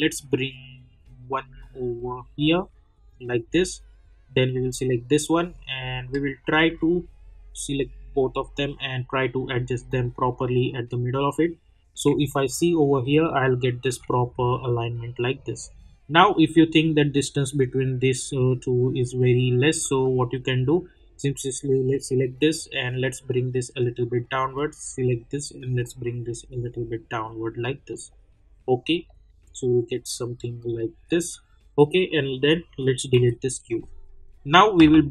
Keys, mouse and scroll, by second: 10.4 middle click, 12.3-16.3 alt+drag, 16.7 scroll up 1, 17.3 click, 19.0 middle click, 21.4-27.9 drag, 27.9 middle click, 32.2 click.